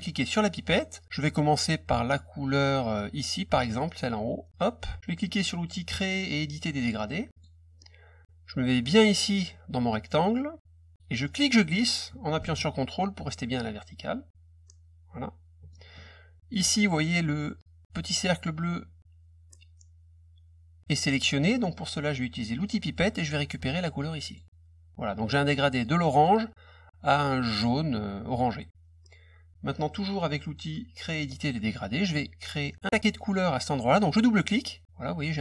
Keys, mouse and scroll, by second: 0.3 click, 4.5 click, 7.3 click, 11.2-15.7 drag, 22.5 click, 24.2 click, 26.1 click, 27.5 click, 31.1 click.